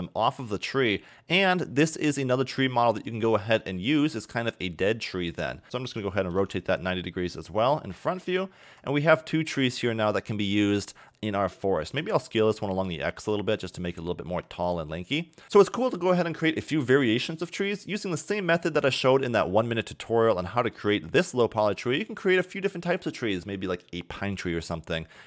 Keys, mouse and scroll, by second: 3.2-5.6 middle drag, 5.9 r, 8.7 g, 11.9 s, 14.3 s, 15.4 click, 18.3 click, 20.1-20.7 scroll up 1, 20.7 a, 21.2 a, 21.8 click.